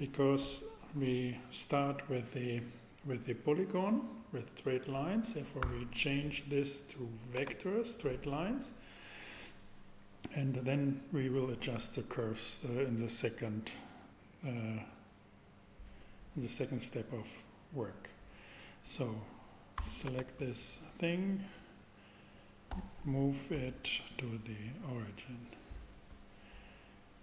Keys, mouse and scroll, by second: 5.6 v, 22.7 super+g, 23.5 ctrl+g.